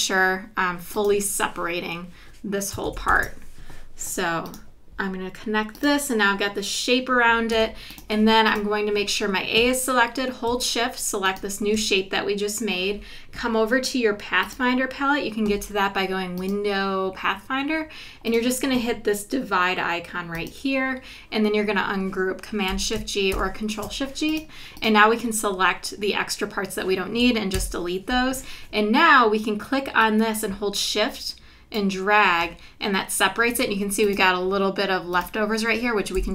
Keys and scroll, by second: 2.9 super+-, 7.5 v, 23.3 shift+super+g, 27.6 BackSpace.